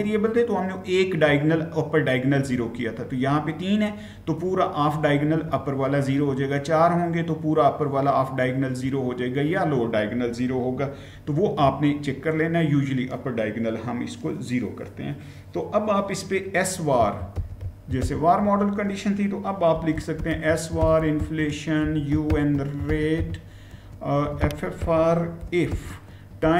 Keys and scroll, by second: 16.6-26.5 typing.